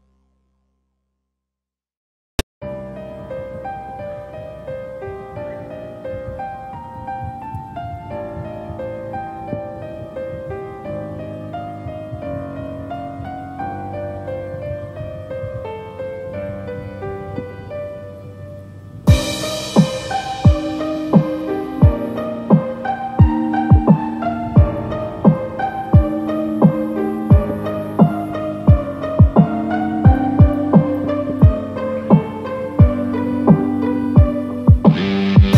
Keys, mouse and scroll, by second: 0.1 shift+click, 0.5 scroll down 2, 1.2 scroll up 3, 1.4 shift+middle click, 1.7 scroll up 2, 2.2 middle click, 2.6 scroll down 2, 2.9 middle click, 5.8 middle click, 6.4 shift+click, 6.8 shift+click, 7.0 scroll down 4, 7.2 middle click, 8.2-8.6 scroll down 2, 8.6 shift+middle click, 8.8 middle click, 9.4 scroll up 1, 11.9 click, 13.2 Tab, 14.4 click, 15.1 Tab, 16.6 click, 17.7 click, 18.3 click, 19.9 click, 20.5 Tab, 21.5 click, 23.5 middle click, 26.0 click, 27.0-28.2 scroll down 1, 28.2 scroll down 1, 28.2 click.